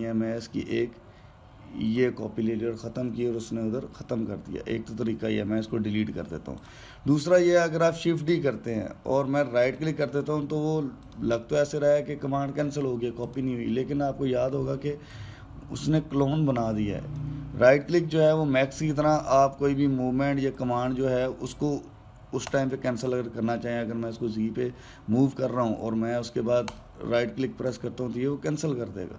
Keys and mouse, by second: 6.5 Delete, 7.4 click, 8.7 shift+d, 11.9 click, 14.0 click, 15.9 click, 21.3 click, 25.0 click.